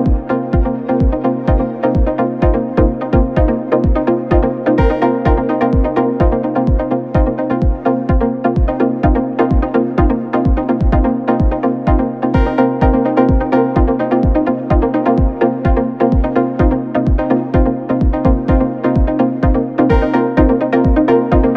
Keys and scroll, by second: 3.3 3, 13.5 Escape, 19.3 4.